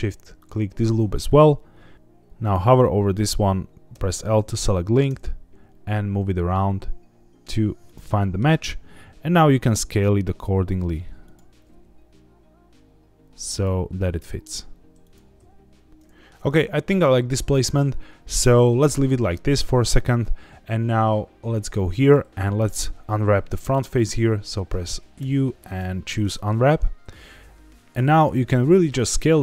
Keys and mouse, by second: 3.9 l, 5.0 g, 7.8 click, 8.2 shift+middle click, 9.5 g, 11.2 click, 11.5 s, 11.7 x, 13.5 click, 13.7 g, 14.0 x, 15.0 click, 15.2 s, 15.4 x, 15.9 middle click, 22.1 middle click, 23.6 middle click, 25.2 u, 27.0 a, 27.9 s, 28.9 click, 29.1 g.